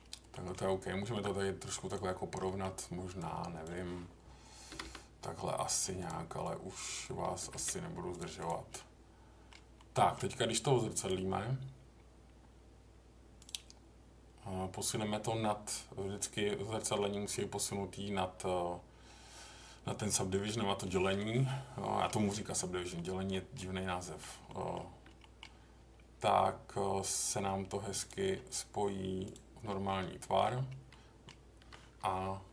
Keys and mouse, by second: 0.3 middle click, 0.6 Tab, 1.8 click, 2.4 middle click, 3.2 click, 4.7 g, 4.8 g, 5.7 click, 6.4 click, 7.4 g, 7.5 g, 8.1 click, 8.3 click, 8.7 middle click, 9.7 middle click, 11.1-13.5 drag, 14.9-17.3 drag, 21.2 middle click, 22.0 middle click, 22.9 middle click, 23.6 middle click, 24.4 middle click, 25.2 middle click, 28.0 click, 29.9 middle click, 30.9 middle click, 32.2 Tab.